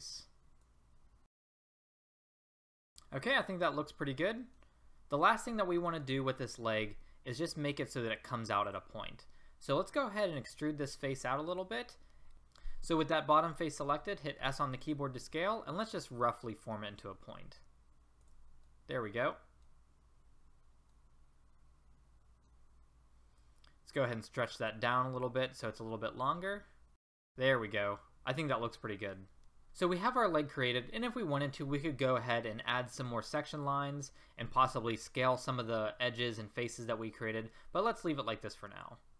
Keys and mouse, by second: 2.0 middle click, 4.0-5.6 middle drag, 6.0 a, 10.4 e, 12.3 ctrl+z, 14.3 s, 18.8 middle click, 21.0 middle click, 21.2 middle click, 21.8 middle click, 22.1 right click, 23.4-26.5 middle drag, 26.5 click, 27.4 click, 28.0-29.7 middle drag.